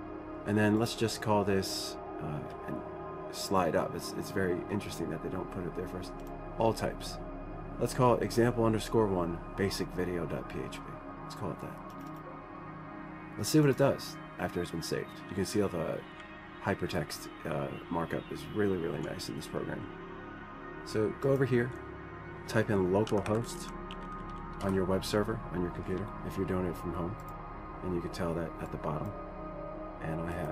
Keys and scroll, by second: 23.4-25.2 typing.